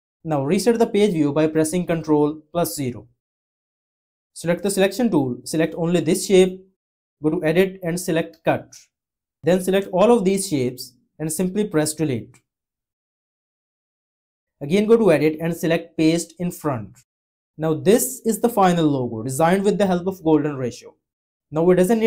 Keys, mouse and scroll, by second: 2.0 ctrl+0.